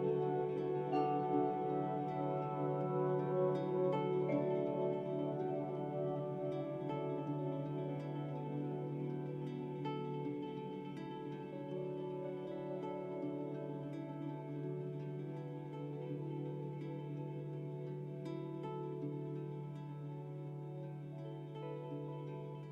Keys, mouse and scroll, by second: 0.6 [, 0.7 [, 0.9 [, 1.2-4.9 drag, 5.0 click, 6.3 click, 9.1 click, 15.6-17.9 drag, 21.5 click.